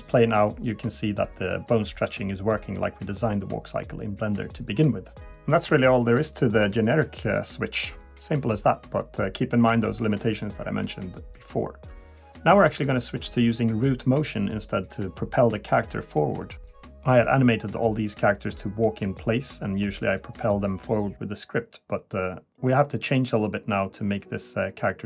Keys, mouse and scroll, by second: 11.2 click, 11.2 click, 12.8-13.2 scroll down 1, 13.2 middle click, 20.2 click, 21.4 click, 23.1-24.0 scroll up 1, 24.0 scroll down 2, 24.8 KP_1.